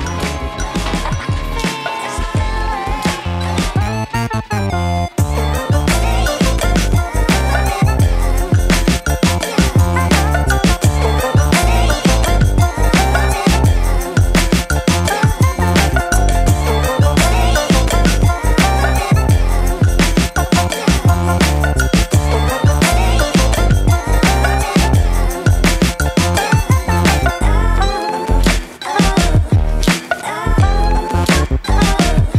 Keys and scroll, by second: 15.3 Delete.